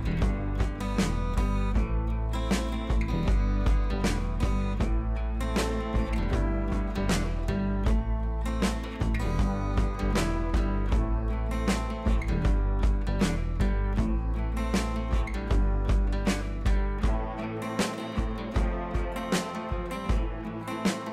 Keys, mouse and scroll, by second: 0.2-3.9 drag, 6.5-13.2 drag, 13.6-14.6 scroll down 1, 14.6 click, 15.4 scroll up 1, 19.4 click, 20.8 b.